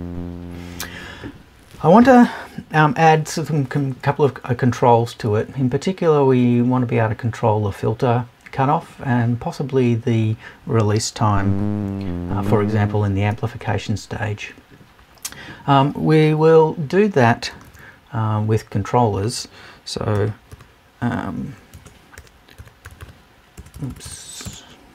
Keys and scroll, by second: 21.7 BackSpace, 23.7 BackSpace.